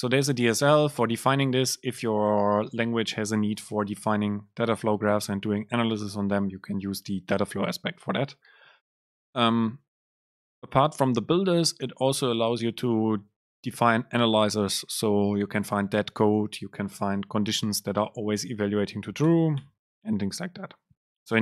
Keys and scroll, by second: 19.4 BackSpace.